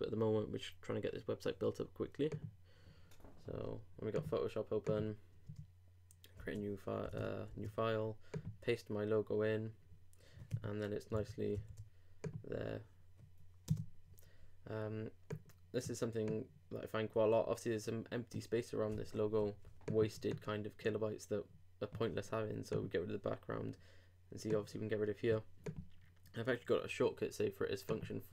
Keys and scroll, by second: 6.4 super+Home, 6.5 super+Tab, 7.5 super+v, 11.1 super+Escape, 11.5 super+v.